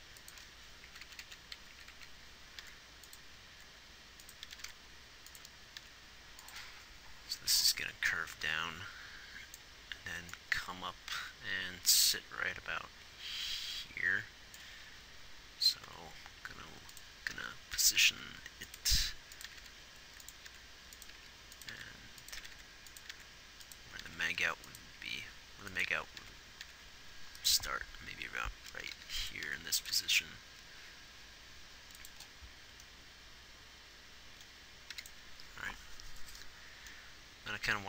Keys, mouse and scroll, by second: 1.2-1.6 Left, 1.9 Right, 3.4 r, 4.0 r, 4.8 r, 6.1 r, 16.2 r, 17.6 g, 18.4 r, 19.2 r, 20.8 r, 21.5 g, 22.0 r, 22.8 r, 24.3 r, 29.2 g, 29.8 r, 30.2 r.